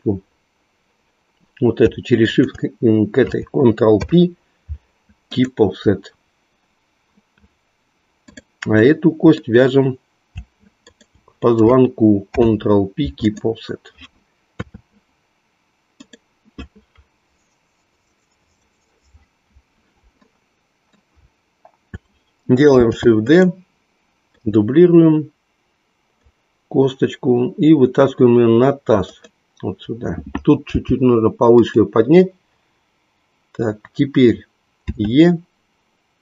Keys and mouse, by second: 2.2 shift+click, 3.8 ctrl+p, 8.2 click, 8.9-10.3 middle drag, 10.8 shift+click, 12.3 ctrl+p, 14.5 KP_3, 20.2 shift+middle click, 23.5 shift+d, 24.3-26.2 drag, 29.1-30.3 drag, 30.8 g, 31.5 click, 34.8 e.